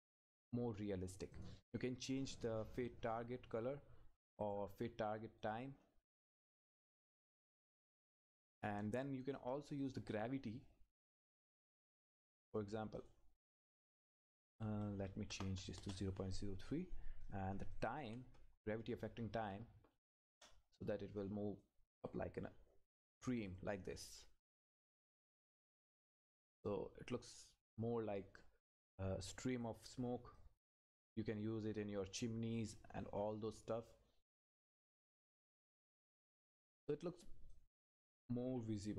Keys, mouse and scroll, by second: 1.3 click, 11.2 Left, 13.0 click, 14.7 Left, 15.8 Return, 17.2 click, 18.0 Right, 20.3 Return, 21.2 click, 22.1-22.6 scroll up 1, 23.5 click, 24.1 Left, 27.5 scroll up 1, 28.4 click, 29.0-29.4 scroll up 1, 29.4-34.4 drag, 37.5 click.